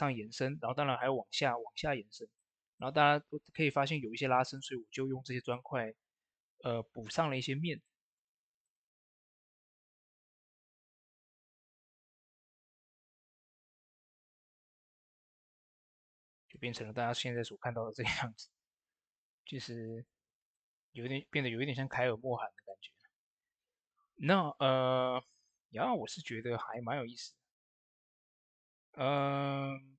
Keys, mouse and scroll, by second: 1.9 click, 2.2 shift+middle click, 4.4 click, 5.4-6.9 middle drag, 6.9 click, 7.7-8.5 typing, 9.0 middle click, 10.0 click, 12.1 ctrl+a, 12.3-16.4 drag, 17.2 middle click, 19.7 click, 27.6 click, 27.6 click, 28.3-29.8 middle drag, 29.8 click.